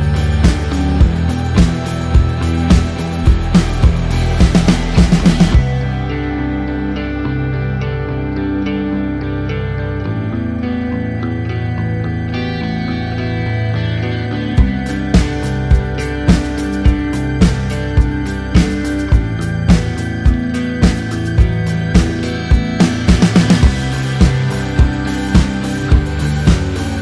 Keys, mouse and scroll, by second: 3.0 click, 8.2 KP_Enter, 9.1 a, 9.3 click, 11.3 click, 11.8 a, 12.7 click, 19.0 click, 19.8 f, 20.5 KP_Enter, 22.5 click, 24.3 alt+click, 25.1 KP_Enter, 26.5-27.0 typing.